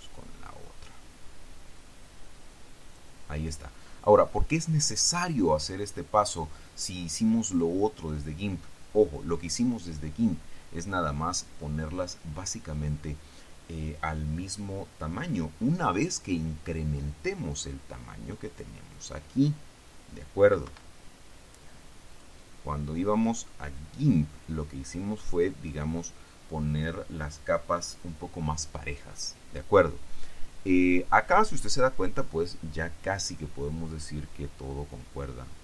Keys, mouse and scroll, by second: 19.1 click, 20.8 Escape, 22.2 click, 23.8 click, 25.5 click.